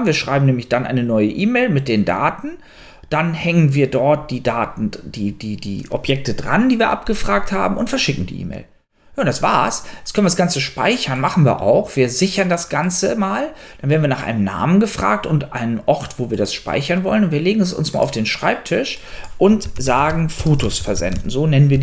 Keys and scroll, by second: 19.6-21.8 typing.